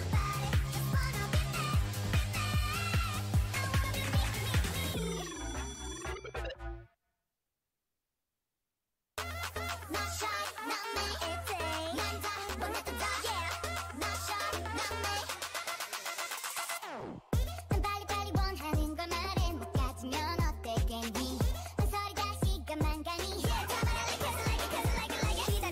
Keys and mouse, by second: 3.2 Tab, 3.8 a, 5.2 k, 10.0 right click, 10.8 alt+m, 13.6 ctrl+r, 15.7 a, 16.0 k, 16.6-17.7 drag, 20.0-21.8 right drag, 20.3 g, 22.0 ctrl+z, 22.4 ctrl+z, 22.7 ctrl+z, 22.9 ctrl+z, 23.6 a.